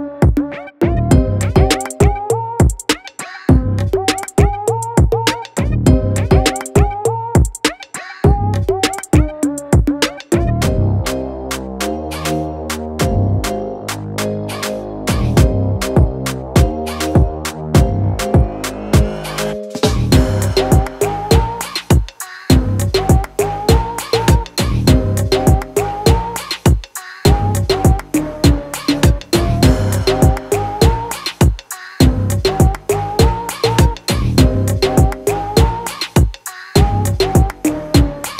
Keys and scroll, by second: 15.8 2, 16.2 0.